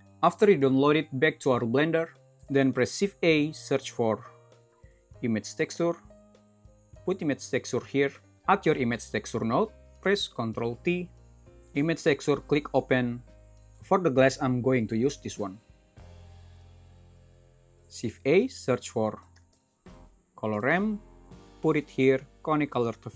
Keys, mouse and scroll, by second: 3.0 shift+a, 9.8 typing, 11.0 ctrl+t, 17.9 shift+a.